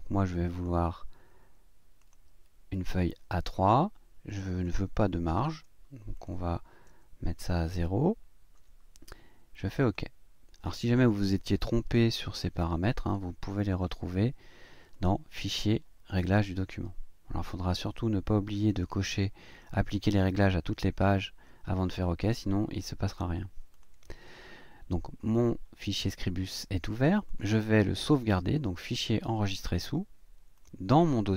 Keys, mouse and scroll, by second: 0.5 click, 2.0 click, 4.3 click, 6.1 click, 6.9 KP_0, 9.8 click, 12.2 ctrl+scroll down 2, 13.4 ctrl+scroll up 2, 14.9 click, 16.2 click, 23.7 click, 27.3 click, 28.9 click, 30.5 click.